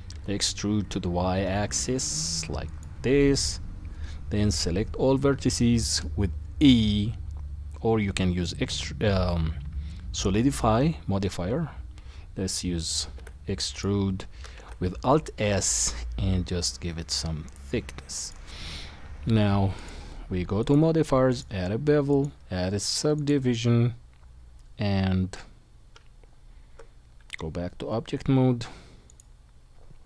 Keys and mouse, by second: 4.4 a, 13.2 e, 14.5 alt+s, 19.7 click, 20.6-30.0 drag, 25.9 Tab.